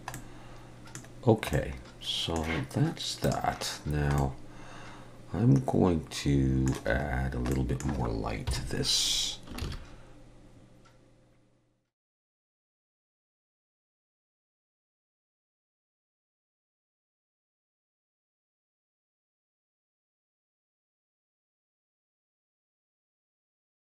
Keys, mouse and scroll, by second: 0.1 middle click, 1.1-1.5 scroll down 2, 1.5 middle click, 3.3 click, 3.9-4.2 scroll down 1, 4.2 middle click, 7.2-7.5 scroll down 1, 7.5 middle click, 8.5 KP_7, 9.6 shift+a, 12.8-15.8 typing, 15.7 middle click, 16.0 middle click, 16.4 click, 16.5 scroll down 1, 16.6 click, 17.2 click, 17.6 middle click, 18.0 middle click, 18.3-20.1 typing, 20.7 middle click, 20.9 middle click, 21.1 middle click, 21.6-23.2 typing, 22.3 middle click, 22.5 middle click, 22.9 middle click, 23.4 middle click, 23.7 click.